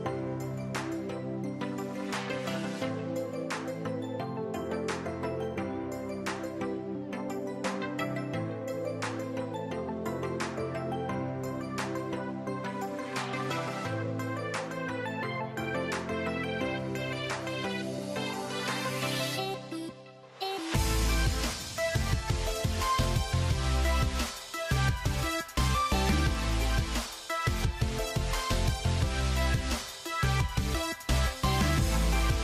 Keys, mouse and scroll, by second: 0.5 click, 1.2-4.3 drag, 2.4 KP_0, 2.6 KP_Enter, 4.9 click, 7.8 scroll up 1, 9.3 click, 12.2 click, 19.0 click, 19.8 ctrl+r, 20.9 click, 21.2 ctrl+r, 22.1 click, 23.3 click, 23.7 alt+click, 24.2 click, 24.8 shift+click, 25.2 shift+click, 25.5 shift+click, 25.9 shift+click, 26.2 shift+click, 26.7 shift+click, 27.0 shift+click, 27.3 shift+click, 27.7 shift+click, 28.1 middle click, 28.8 shift+click, 29.5 shift+click, 30.0 middle click, 31.0-32.4 drag.